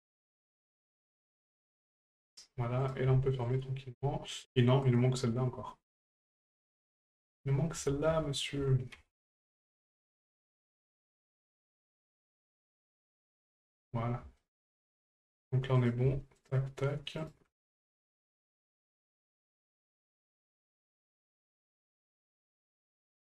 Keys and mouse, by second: 0.7 ctrl+click, 2.8 right click, 3.4 shift+right click, 4.8 right click, 6.2-10.1 ctrl+drag, 11.3 ctrl+r, 12.4 ctrl+click, 14.4 shift+middle click, 15.8 right click, 16.4 shift+right click, 17.2 shift+right click, 19.5 shift+right click, 20.7 shift+right click, 22.5 right click.